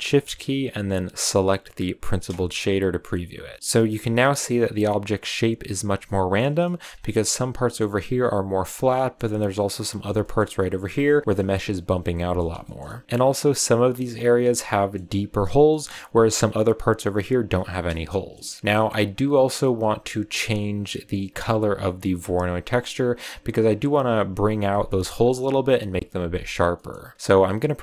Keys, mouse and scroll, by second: 2.0 ctrl+shift+click, 3.5-5.8 shift+middle drag, 6.0-6.9 shift+middle drag, 6.9 scroll up 6, 8.5 scroll down 4, 8.8-9.2 shift+middle drag, 9.2 scroll up 3, 10.1-12.7 shift+middle drag, 12.7 scroll down 1, 12.9 scroll up 3, 13.0-15.5 middle drag, 15.5 scroll down 2, 15.6-15.9 middle drag, 15.9 scroll up 2, 18.2 KP_0, 18.6 scroll down 3, 19.2 scroll up 1, 19.3-21.5 middle drag, 21.5 click, 26.7-27.8 middle drag.